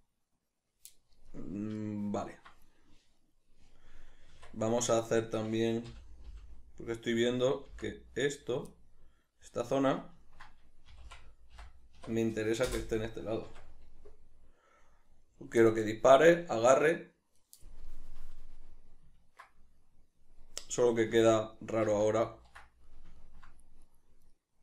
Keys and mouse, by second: 4.7 Tab, 5.5 right click, 6.3 l, 9.1-11.3 middle drag, 11.3 s, 13.1 Return, 13.9 Tab, 14.1-24.3 middle drag, 21.7 ctrl+z, 24.3 right click.